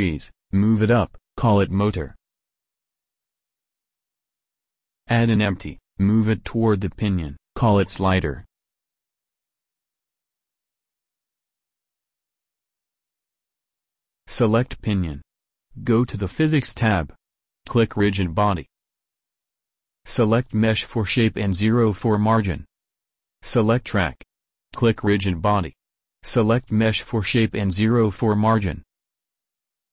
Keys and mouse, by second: 0.5 g, 2.5-4.0 drag, 5.4 shift+a, 7.1 s, 8.6 click, 8.6 g, 14.7 click, 22.5 ctrl+x, 25.3 middle click.